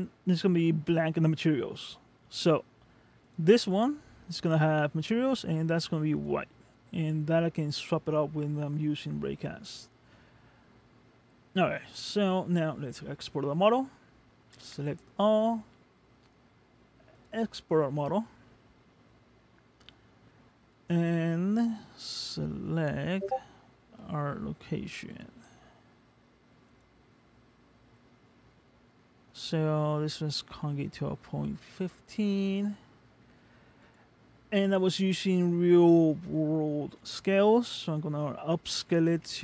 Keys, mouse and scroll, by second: 6.3 click, 10.0-10.3 scroll down 1, 10.9-11.8 scroll down 2, 11.8 middle click, 14.7 a, 17.2 click.